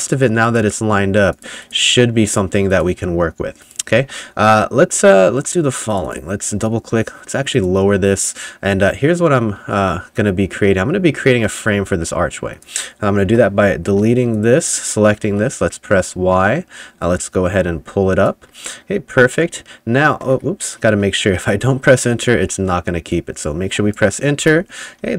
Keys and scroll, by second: 3.8-4.6 typing, 8.9 3, 9.9 2, 11.8 3, 13.3 Delete, 13.9 2, 15.3 y, 19.5 3, 21.3 2, 22.4 y, 24.4 Return, 25.0 3.